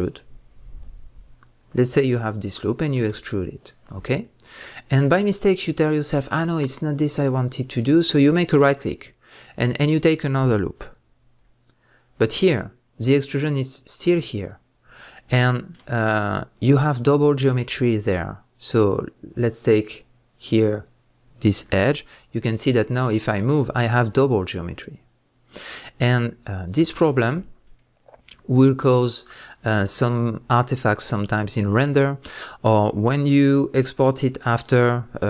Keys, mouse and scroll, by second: 3.1 e, 8.6 right click, 10.9 alt+click, 15.1 scroll up 1, 15.5-20.7 shift+middle drag, 16.0 scroll up 1, 17.8 scroll down 1, 18.4-20.7 scroll down 1, 20.7 click, 22.7 g, 26.7 right click, 27.1 scroll down 1, 27.6-35.2 middle drag.